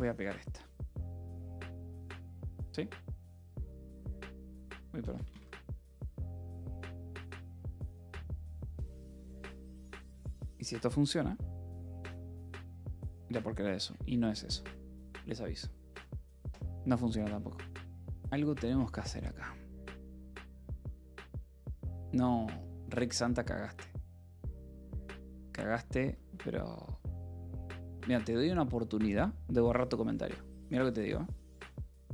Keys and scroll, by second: 0.5 ctrl+s, 1.1 space, 1.7 Return, 2.9 ctrl+s, 3.6 Up, 4.1-6.5 typing, 4.2 Return.